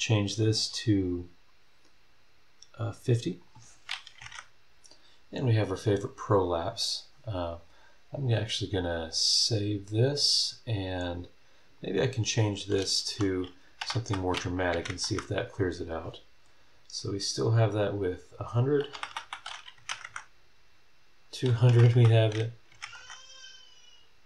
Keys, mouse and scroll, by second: 3.4 click, 4.2 KP_5, 4.2 KP_0, 10.2 click, 11.8 click, 13.0 Left, 13.8 BackSpace, 14.7 KP_1, 14.9 KP_0, 16.9 scroll up 1, 18.9 BackSpace, 19.8 KP_2, 19.9 KP_0, 21.7 BackSpace, 22.7 KP_5, 22.8 KP_0.